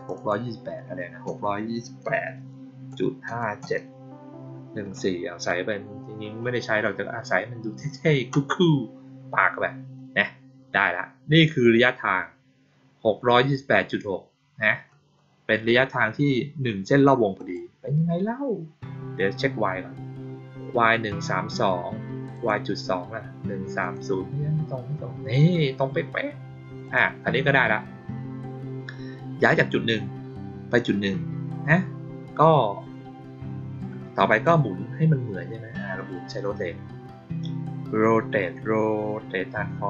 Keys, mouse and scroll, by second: 0.1 click, 17.3 click, 22.3 click, 23.7 click, 24.2-25.4 middle drag, 26.8 click, 34.2 click.